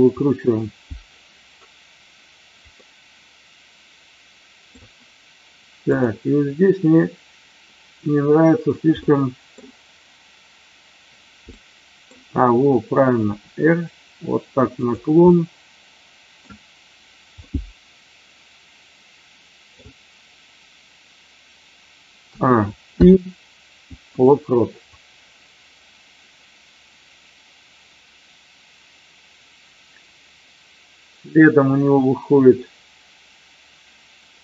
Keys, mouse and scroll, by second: 2.7-4.7 middle drag, 9.1-9.4 middle drag, 11.4-11.9 middle drag, 13.3 r, 15.3-16.4 middle drag, 17.4-19.8 middle drag, 22.2 a, 22.8 i, 24.9-34.4 drag.